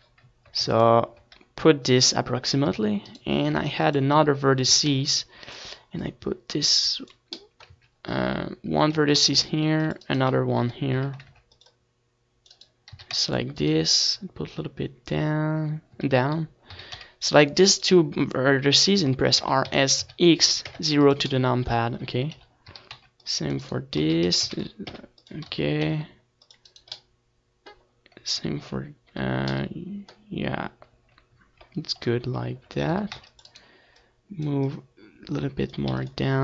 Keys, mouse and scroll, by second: 0.6 ctrl+s, 2.6 c, 2.9 middle click, 3.1-4.7 right drag, 3.4 ctrl+r, 4.7 a, 4.9 c, 5.2 click, 8.2 ctrl+z, 8.8 z, 9.7 a, 10.1 ctrl+r, 11.1-13.0 right drag, 11.6 KP_1, 12.0 z, 12.3 c, 14.1-15.5 right drag, 14.3 a, 14.5 c, 16.9 click, 17.5 middle click, 17.6 click, 17.7-19.8 middle drag, 17.7 a, 18.1 a, 18.7 a, 18.9 c, 19.8-22.0 right drag, 21.8 r, 23.8 click, 24.0-25.6 middle drag, 25.1 KP_1, 25.5 a, 25.8 c, 26.6-28.4 right drag, 26.9 r, 28.6-30.1 drag, 28.6 a, 29.1 c, 30.3-31.6 middle drag, 31.5 KP_1, 32.6 z, 33.0-35.2 middle drag, 35.8 KP_1, 36.3 z.